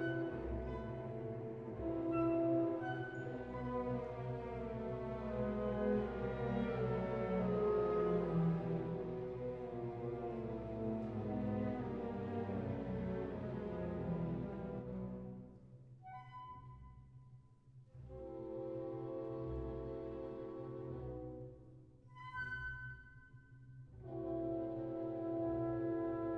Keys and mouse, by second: 0.7 Tab, 1.3 ctrl+r, 4.9 ctrl+r, 7.1 click, 7.3 Tab, 13.6 Tab, 14.2 ctrl+r, 17.1 click, 17.3 Tab, 19.0 Tab, 19.5 Tab, 25.6 Tab, 26.1 ctrl+r.